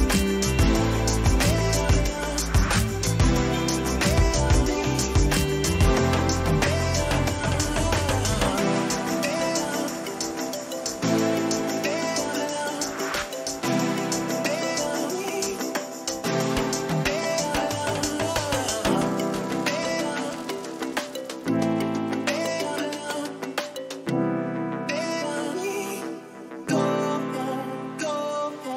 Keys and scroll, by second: 2.5 Up, 8.0 Down, 11.6 Up.